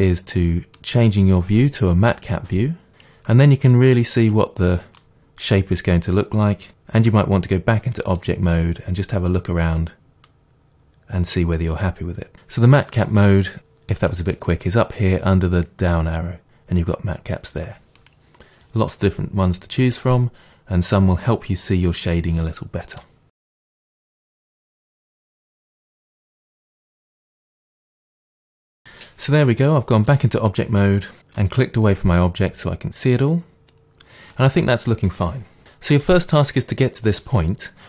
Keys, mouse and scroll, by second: 0.8-5.0 drag, 5.0-8.1 middle drag, 7.0 Tab, 8.1 click, 8.2-14.0 middle drag, 12.3 click, 14.0-22.5 drag, 22.5-23.6 middle drag, 23.6-24.6 drag, 24.6 middle click, 24.9 Tab, 25.3 click, 25.6 Tab, 25.6 middle click, 25.8 click, 25.8-28.1 typing, 25.9 click, 26.0 middle click, 26.1 click, 26.2 click, 26.4 click, 26.6 click, 26.6 middle click, 26.9 middle click, 27.2 click, 27.4 middle click, 27.5 click, 27.7 middle click, 28.0 middle click, 28.2 middle click, 28.3 click, 28.5 middle click, 28.6 Tab, 29.3-37.8 middle drag.